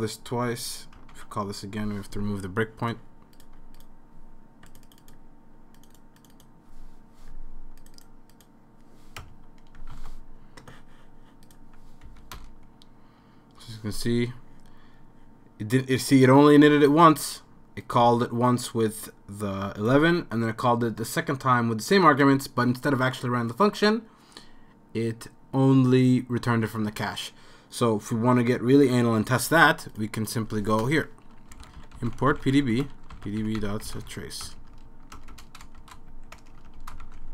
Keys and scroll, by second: 1.1 Return, 9.2 BackSpace, 9.9 super+s, 11.8 super+s, 12.1 Up, 12.3 Return, 30.8 Return, 31.3-37.3 typing.